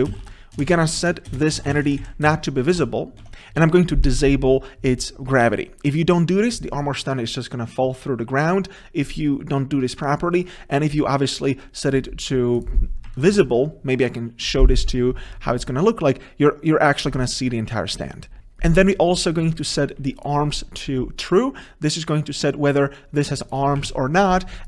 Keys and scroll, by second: 1.4 ctrl+space, 2.3 Return, 5.1 Tab, 18.4 ctrl+v, 20.3 ctrl+b.